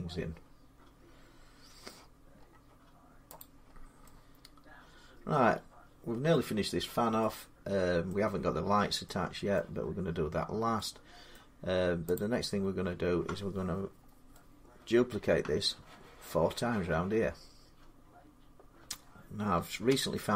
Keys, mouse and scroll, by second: 1.7 scroll up 1, 2.0 scroll, 2.2 scroll up 2, 3.2 click, 3.5-3.9 scroll down 4, 4.2 middle click, 6.1 middle click, 6.2 middle click, 8.0 middle click, 8.0 scroll, 9.4 middle click, 11.2 middle click, 12.0 click, 13.7-14.1 scroll down 3, 14.5 scroll, 14.9 middle click, 18.2 middle click, 19.7 Tab.